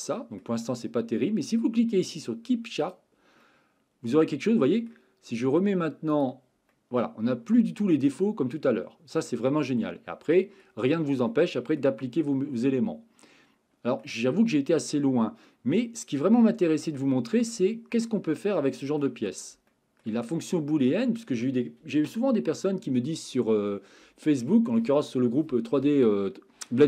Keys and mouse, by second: 3.4-4.9 middle drag, 6.1 click, 6.7-10.6 middle drag, 11.3-11.8 middle drag, 12.6-14.0 middle drag, 14.8-18.0 middle drag, 18.3-19.0 middle drag, 19.7 shift+middle drag, 20.3 middle click, 21.0 shift+middle click.